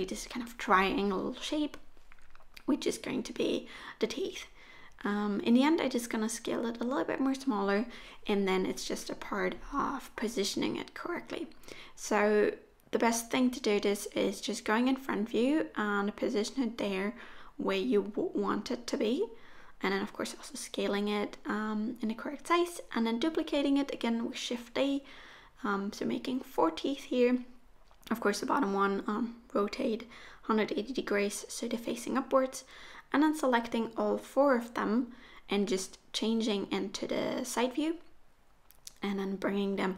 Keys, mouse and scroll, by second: 0.8 Tab, 1.1 right click, 2.0 scroll down 4, 2.2 middle click, 3.1 middle click, 3.4 Tab, 3.7 s, 4.9 a, 5.2 s, 7.1 r, 11.0-11.4 scroll down 2, 11.4 shift+middle click, 11.7 Tab, 13.5 KP_1, 14.3 g, 15.9 shift+middle click, 16.5-17.1 scroll up 7, 17.2 shift+middle click, 18.2 s, 19.9 g, 21.4 shift+d, 23.2 shift+d, 24.8 r, 28.2 g, 29.5 shift+d, 31.3 click, 31.8 click, 32.0 shift+click, 32.2 shift+click, 32.9 shift+click, 33.5 click, 33.6 shift+click, 33.8 shift+click, 34.0 shift+click, 35.0 shift+click, 35.6 middle click, 36.7 KP_3, 38.1 g, 39.4 r.